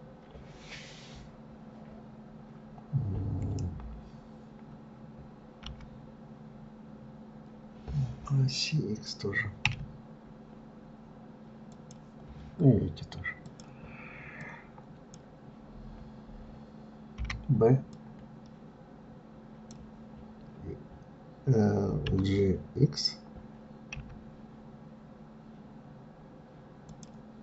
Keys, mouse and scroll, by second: 13.7 click, 14.6 click, 17.4 b.